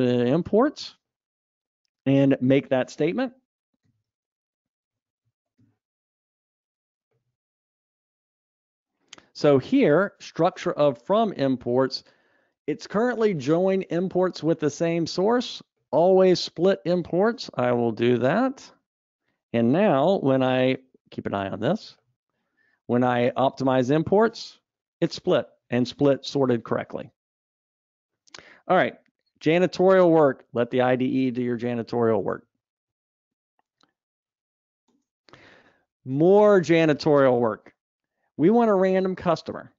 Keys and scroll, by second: 24.8 ctrl+alt+o, 31.4 alt+Up, 32.8 alt+Up.